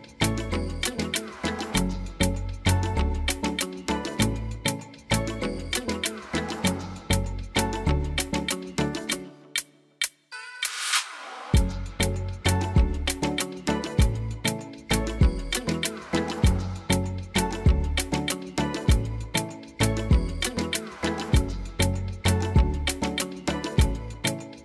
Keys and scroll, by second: 0.7 8, 0.8 Return, 6.2 2, 8.4 Return, 12.4 7, 12.9 Return, 13.6 7, 14.2 Return, 14.7 7, 15.1 Return.